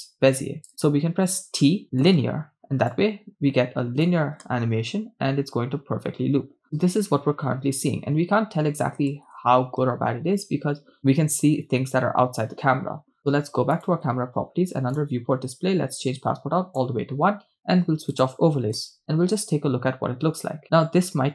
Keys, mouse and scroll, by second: 1.5 t, 3.0-4.3 drag, 4.4 shift+space, 9.1 shift+space, 13.8-14.9 drag, 15.9 scroll down 2, 16.2 click, 18.2 click, 18.8 shift+space.